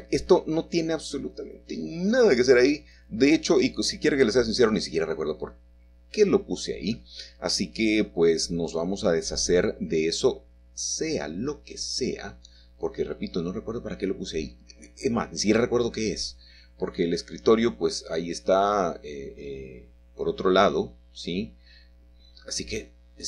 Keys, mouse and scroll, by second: 1.6-3.8 shift+middle drag, 3.6 typing, 4.6 middle click, 5.6 typing, 6.6-7.9 middle drag, 10.6-12.0 middle drag, 12.2 typing, 13.6 middle click, 15.5 middle click, 17.0-19.3 scroll down 1, 19.3-19.7 scroll down 1, 19.7-21.7 middle drag.